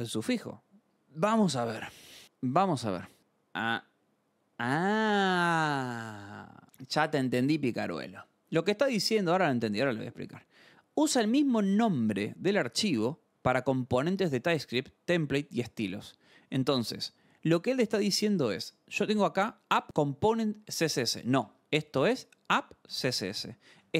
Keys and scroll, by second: 1.0 scroll down 1, 1.1-3.1 scroll down 1, 5.3 scroll, 18.0 alt+Tab, 18.6-21.8 typing, 22.9-23.9 typing.